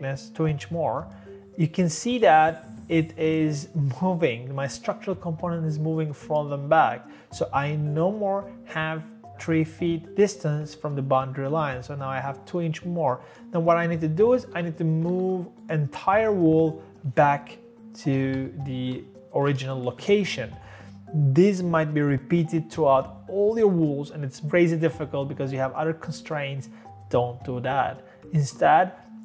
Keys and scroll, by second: 14.5-15.0 typing, 17.2 typing, 18.2 typing, 18.8 Return, 19.4 Escape, 19.7 Escape.